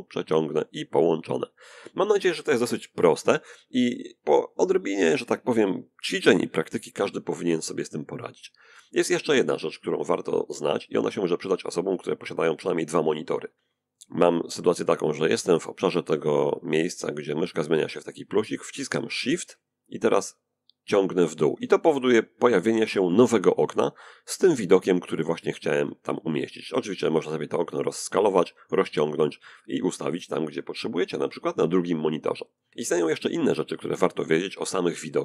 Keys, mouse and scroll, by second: 9.8-12.9 drag, 18.6-20.8 shift+drag, 21.6 click, 25.1-27.0 alt+right drag, 26.0-27.0 alt+drag, 27.2 alt+right click, 29.5-31.8 drag, 32.4 click.